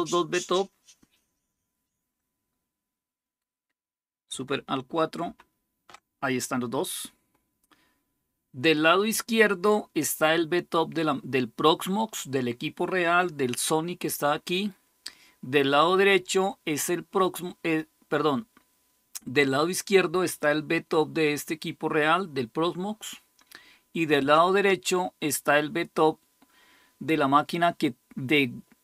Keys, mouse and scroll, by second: 5.0 alt+super+KP_4.